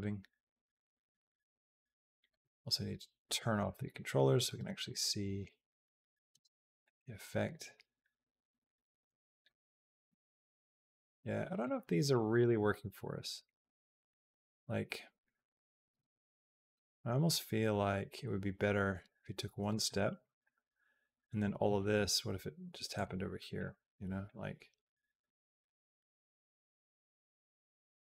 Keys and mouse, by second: 3.1 click, 3.4 click, 4.2 click, 4.4 space, 6.2 space, 6.7-9.3 drag, 9.6 click, 9.9 g, 11.9 click, 12.3-13.9 drag, 14.2 g, 16.0 ctrl+z, 17.2-19.5 drag, 19.7 click, 20.0 b, 21.7 g, 23.4 click, 24.1-28.0 drag.